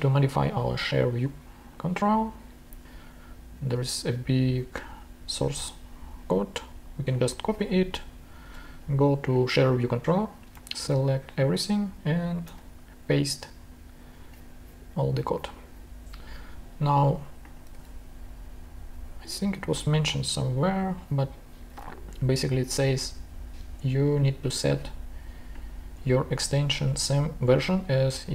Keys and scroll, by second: 7.6 super+Tab, 10.6 super+a, 12.4 super+v, 17.7 super+Tab, 21.8 super+Tab.